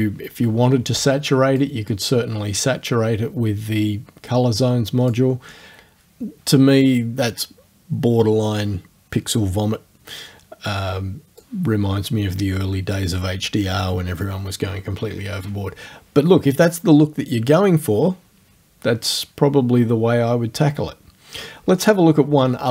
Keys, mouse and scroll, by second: 0.0 click, 1.6-5.3 drag, 11.4 click.